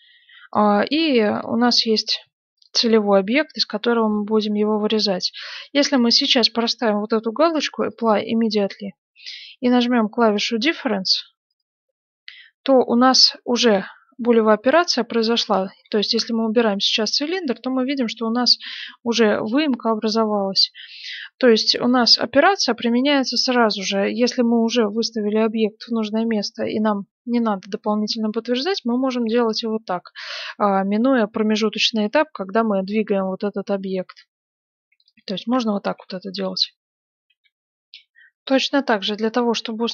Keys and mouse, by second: 3.7 click, 3.8-11.5 middle drag, 11.5-13.4 drag, 13.6-15.8 middle drag, 15.8 g, 17.7-25.1 middle drag, 28.2-30.0 middle drag, 32.0-36.4 middle drag, 34.7 x, 39.1 F9.